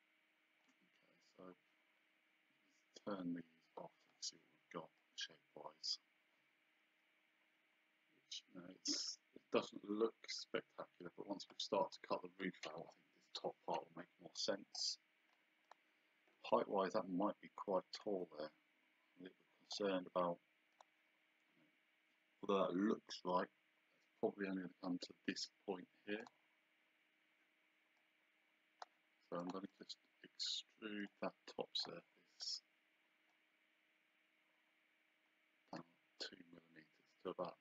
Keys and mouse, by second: 3.7 click, 14.8 click, 18.0 click, 19.7 click, 20.7 click, 26.2 click, 28.0 click, 29.4 click, 29.7 right click, 31.0 click, 33.3 click.